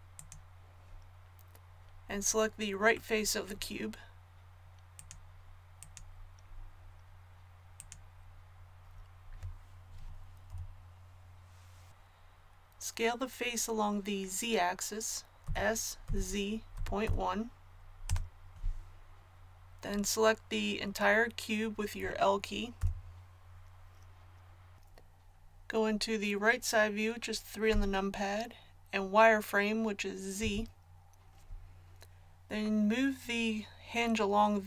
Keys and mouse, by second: 6.4-11.2 middle drag, 30.3 z.